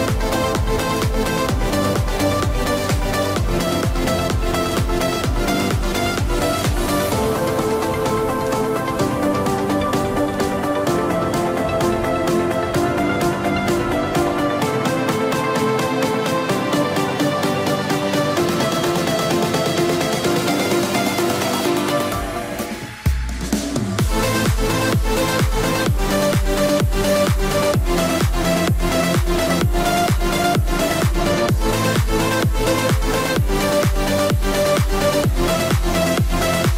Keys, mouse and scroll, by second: 0.1 click, 1.1 scroll down 1, 1.3 middle click, 2.3 click, 2.7 middle click, 4.9 click, 6.2 scroll up 1, 7.2 click, 12.8 middle click, 15.1 right click, 16.0 click, 17.7 middle click, 18.3 click, 22.6 click, 24.9 ctrl+click, 26.5 click, 29.5 click, 32.5 click, 33.3 scroll down 1, 33.5 middle click, 34.6-35.0 scroll up 1, 35.4 middle click.